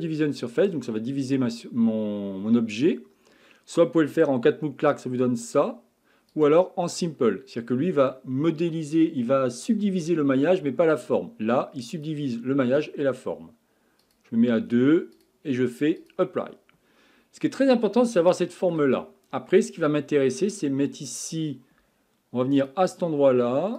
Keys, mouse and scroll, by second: 6.3 click, 11.9 click, 14.0-16.8 drag, 16.8-17.7 scroll up 4, 17.7-18.2 scroll down 2, 18.2-19.8 shift+middle drag, 19.8 scroll up 2, 22.6 click.